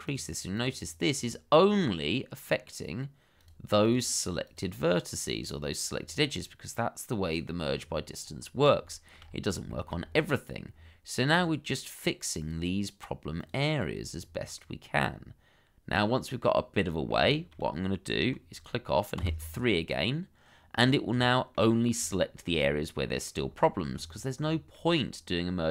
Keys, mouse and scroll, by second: 1.7-3.5 scroll down 1, 4.2 double click, 5.9-6.3 scroll down 1, 6.3 middle click, 7.6 scroll up 1, 8.9 shift+middle click, 9.2-9.5 scroll up 1, 9.7 shift+middle click, 10.0-10.5 shift+scroll up 2, 10.7-11.2 scroll down 1, 14.5 middle click, 17.3 shift+middle click, 19.2 3, 20.7-21.1 scroll down 1, 21.2 shift+middle click, 22.1 shift+middle click, 22.8 middle click, 23.6 shift+middle click, 23.9-24.4 scroll up 1, 24.5 shift+middle click, 25.1 scroll up 1.